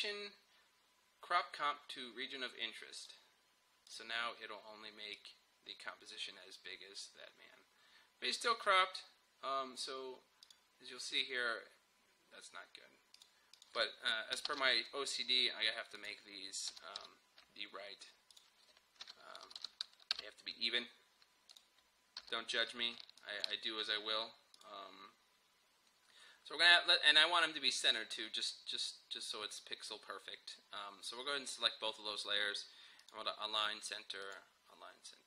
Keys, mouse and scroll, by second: 3.0-10.5 drag, 13.2 click, 14.5 ctrl+k, 16.0 click, 16.7-17.0 typing, 18.3 click, 18.9-20.1 typing, 20.2 Return, 21.5 click, 22.2 u, 23.2 shift+click, 28.7-31.7 drag, 33.1 click.